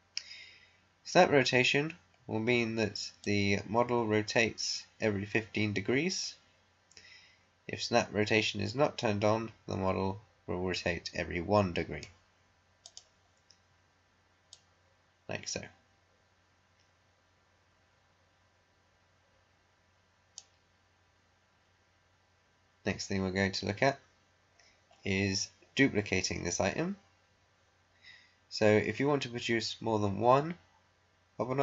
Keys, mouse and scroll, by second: 3.1-12.8 drag, 12.8-22.9 drag, 24.5-24.9 scroll down 1.